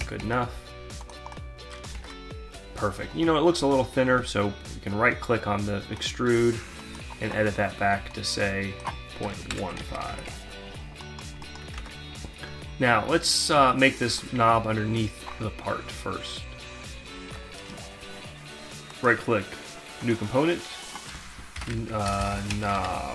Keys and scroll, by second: 2.0 alt+Tab, 9.1 shift+Left, 9.9 5, 10.1 Return, 11.8 alt+Tab, 16.7 alt+Tab, 21.1-23.1 typing.